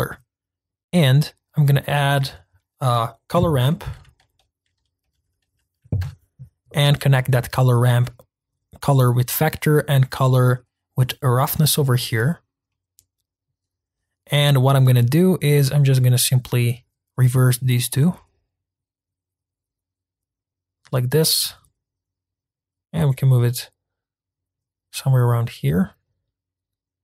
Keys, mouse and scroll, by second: 10.1-11.9 drag, 12.3-12.7 scroll up 2, 12.7-15.6 middle drag, 15.6-27.0 drag.